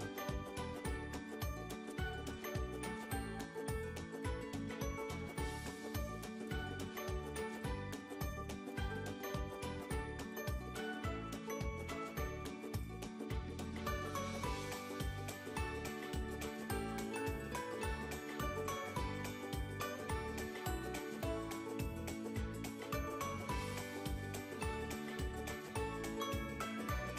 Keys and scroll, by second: 9.4 f, 24.2 z.